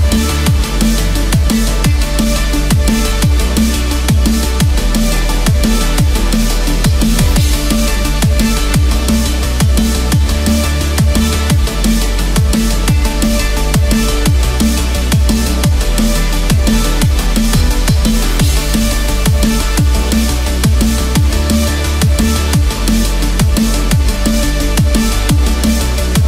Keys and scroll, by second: 3.1 ctrl+z, 17.3 ctrl+d, 22.4 ctrl+=, 22.9 ctrl+=, 24.8 ctrl+=.